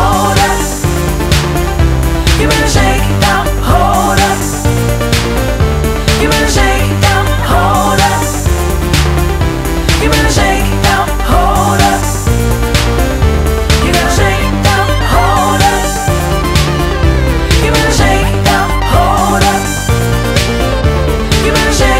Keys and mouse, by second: 0.8 click, 2.1 click, 3.0 click, 4.1 click, 5.8 Delete, 6.4 BackSpace, 8.6 click, 10.0 click, 11.0 click, 11.1 click, 12.2 click, 15.1 click.